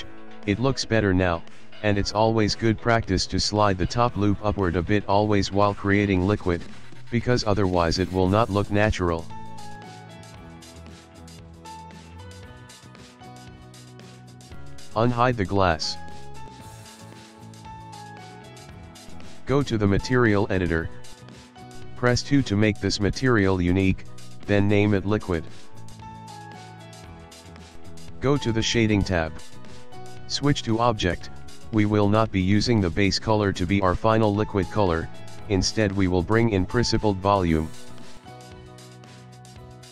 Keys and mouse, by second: 2.7 middle click, 3.4 alt+click, 4.4 g, 7.2 middle click, 10.1 shift+middle click, 10.5 ctrl+middle click, 11.6 Tab, 12.0 middle click, 15.4 click, 16.6 middle click, 17.9 ctrl+middle click, 20.1 click, 21.1 click, 21.7 click, 22.4 click, 23.4 click, 24.2 click, 27.5 click.